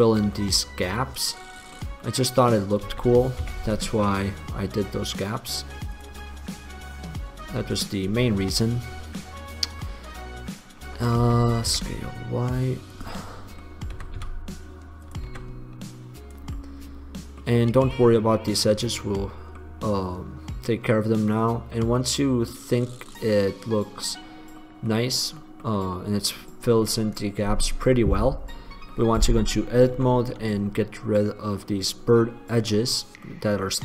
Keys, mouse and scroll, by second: 0.7-1.7 middle drag, 1.9-3.0 middle drag, 3.0 s, 6.5-8.0 middle drag, 8.5 middle click, 11.3 s, 13.2 click, 14.2 s, 15.5 s, 18.5-18.9 drag, 24.7 middle click, 28.9 middle click, 30.1 Tab.